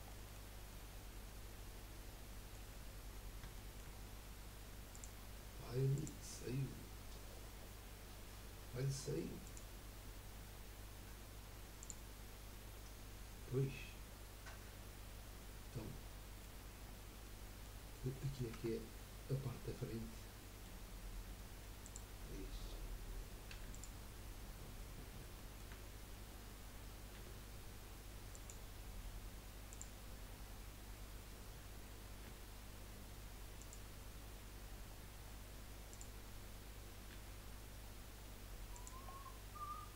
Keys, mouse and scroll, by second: 0.1-4.9 middle drag, 4.9-7.9 drag, 8.8-9.4 middle drag, 9.4 click, 11.9-13.2 drag, 13.6-16.6 middle drag, 16.8-17.2 scroll down 1, 17.2-17.8 middle drag, 17.8 scroll up 1, 18.1 middle click, 18.5 Tab, 19.0-21.8 middle drag, 21.8 click, 23.5 3, 23.7 click, 25.3-27.2 shift+middle drag, 27.2 g, 29.7 click, 30.4-31.3 scroll up 3, 32.4 g, 34.7-35.2 scroll down 5, 35.2-35.9 scroll up 3, 35.9 click, 37.1 g, 39.1-39.5 scroll down 3, 39.5 scroll up 1.